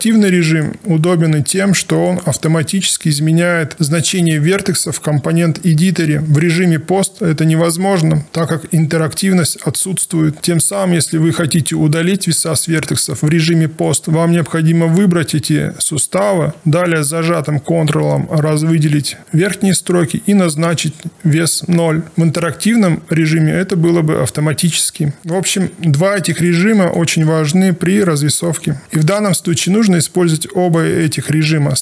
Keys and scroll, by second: 25.5 alt+1.